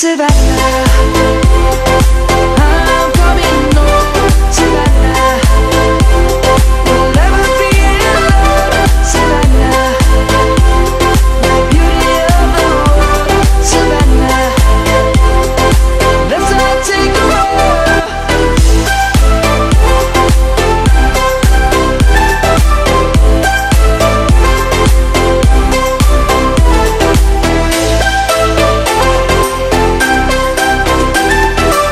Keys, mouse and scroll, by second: 6.4-6.9 drag, 18.7 ctrl+z, 19.1-20.1 drag, 21.6 ctrl+z, 22.6 ctrl+z, 23.2-24.3 drag, 31.2 Up.